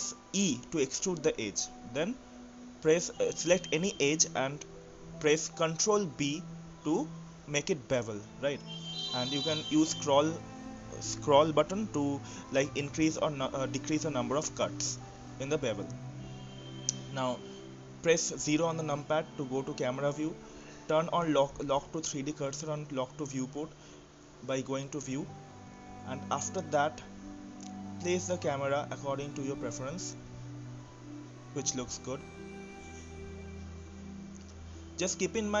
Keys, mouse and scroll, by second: 0.5 click, 1.5 e, 5.1 click, 6.3 ctrl+b, 16.4 Tab, 17.4-17.8 right drag, 17.8-18.5 middle drag, 18.5-19.1 scroll up 3, 19.1-19.7 shift+middle drag, 19.7-20.1 scroll up 2, 20.1-22.3 middle drag, 22.3 KP_0, 23.2-25.2 scroll up 4, 25.2-25.5 scroll up 1, 25.5-27.8 drag, 28.0 click, 29.1 click, 29.7-30.1 scroll down 1, 30.1-31.1 middle drag, 31.1-31.5 scroll down 2, 31.5-34.5 middle drag, 35.1 scroll down 1, 35.3-35.6 scroll up 1.